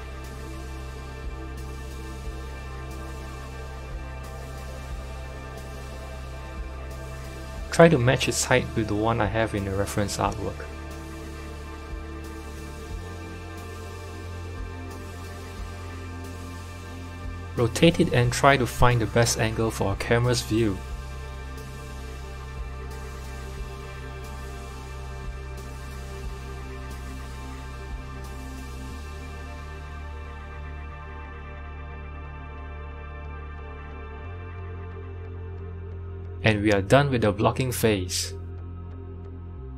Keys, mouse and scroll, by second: 0.9-2.5 drag, 2.5 s, 7.2 click, 7.7 click, 8.1 click, 9.1 s, 13.2 click, 14.9 KP_7, 15.8-16.5 scroll up 2, 16.5-17.1 scroll down 1, 17.1 r, 31.5-33.7 middle drag, 33.7 g, 39.3 click.